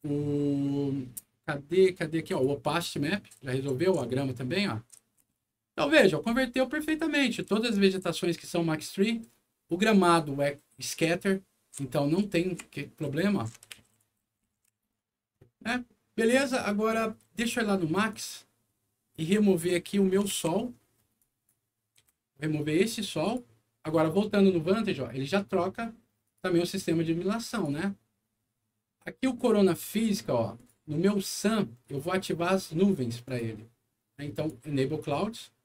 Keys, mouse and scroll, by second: 2.3 click, 3.1-8.0 right drag, 3.4 e, 3.7 w, 5.3 d, 7.4 s, 9.0-14.9 right drag, 11.0 e, 12.2-14.9 typing, 18.1 click, 19.9 middle click, 20.3 alt+w, 20.6 alt+scroll down 2, 21.1 alt+click, 21.9 Delete, 23.2 click, 26.2 click, 27.5 click, 30.5 click, 31.1 click, 33.2 click, 34.3 click.